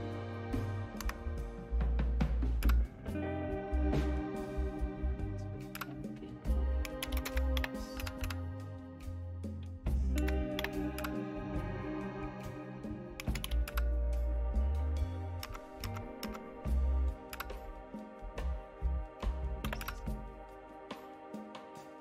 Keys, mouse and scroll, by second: 1.0 Right, 2.6 Return, 5.8 Return, 6.6-8.2 typing, 10.2-11.5 typing, 13.2-13.9 typing, 15.4 Up, 15.8 Up, 16.2 Up, 17.4 Return, 19.7 y, 19.8 Return.